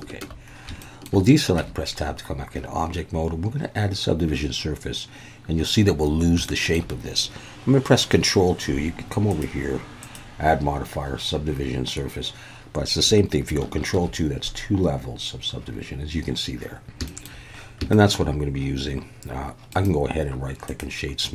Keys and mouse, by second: 0.8 shift+middle click, 1.6 Tab, 6.4 shift+middle click, 9.3 click, 10.1 click, 14.0 ctrl+2, 17.1 shift+middle click, 18.1 shift+middle click, 19.7 click, 20.8 right click.